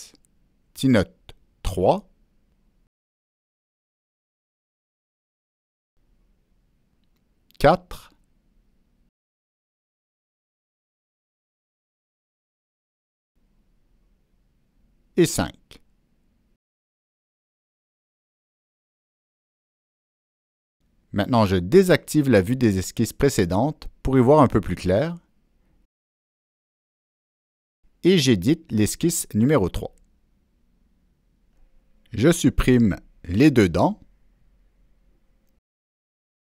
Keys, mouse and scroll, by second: 0.1 ctrl+v, 0.1 click, 4.5 click, 5.4 click, 6.0 click, 9.8 click, 10.9 click, 11.8 click, 13.9 click, 15.1 Return, 15.1 click, 16.2 Return, 16.2 click, 17.0 click, 18.5 shift+click, 20.6 shift+click, 21.9 click, 23.3 click, 26.3 click, 27.4 click, 29.4 ctrl+middle click, 29.4 scroll up 1, 32.4-35.0 drag, 36.1 Delete.